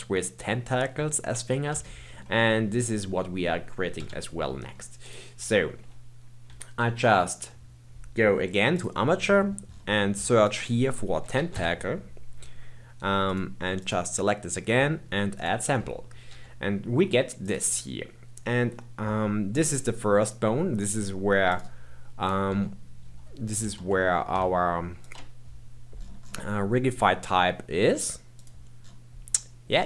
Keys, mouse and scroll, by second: 1.8-3.9 shift+middle drag, 3.9 KP_1, 4.4-5.0 scroll down 2, 5.0 click, 8.7 click, 9.6-10.4 scroll down 6, 10.4-13.3 drag, 13.7 click, 15.3 click, 16.2 g, 21.4 click, 22.4 Tab, 23.0 Tab, 23.6 ctrl+Tab, 24.4 ctrl+Tab, 25.9-28.3 scroll down 11, 28.3 click.